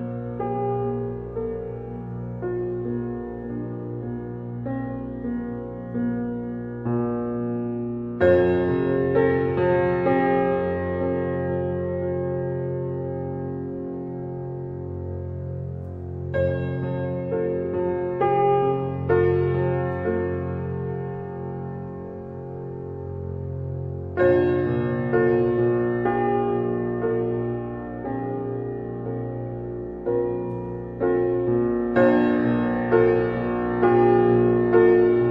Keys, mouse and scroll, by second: 1.1 g, 2.7 Tab, 11.5-20.7 drag, 20.7 g, 24.6 Tab, 25.7 click, 26.7 g, 28.6 Tab, 29.4 click, 29.9-33.0 middle drag, 33.0 click, 33.8-35.3 middle drag.